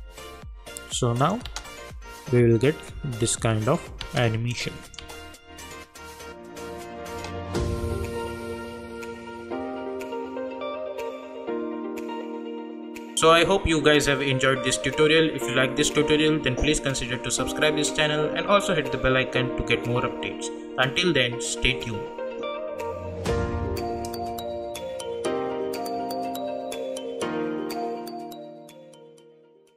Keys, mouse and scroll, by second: 1.2 click, 1.4 space, 4.0 space, 4.5 click, 5.0 space, 7.2 space.